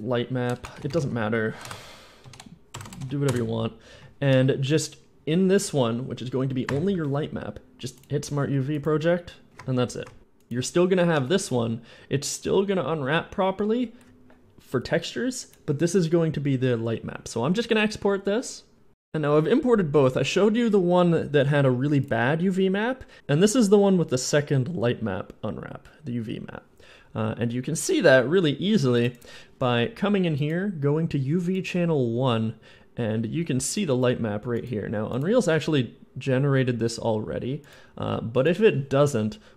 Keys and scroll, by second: 0.4-2.8 typing, 3.1 Return, 6.5 u, 6.8 u.